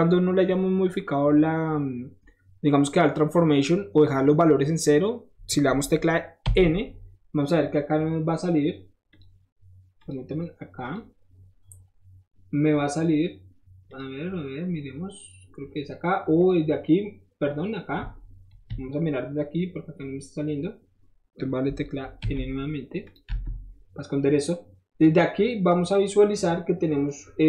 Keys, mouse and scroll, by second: 6.5-9.1 middle drag, 9.1 click, 9.2-10.0 middle drag, 10.0 click, 10.8 click, 13.9 click, 15.4 middle click, 16.4 click, 18.8 KP_Multiply, 23.1 click, 25.9 click.